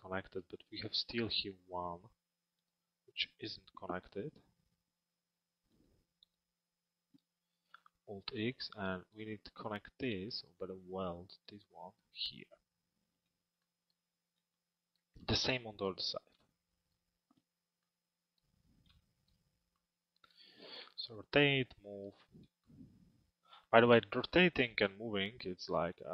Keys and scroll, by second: 7.5 alt+x.